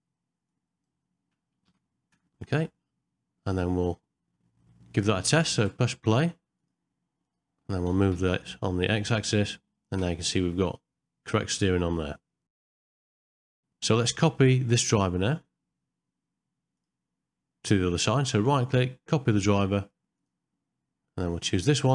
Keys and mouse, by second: 5.7 space, 6.6 click, 7.2 click, 7.9 g, 13.1 shift+middle click, 13.2 ctrl+middle click, 13.5 shift+middle click, 16.7 click, 18.4-20.2 right drag, 21.6 click.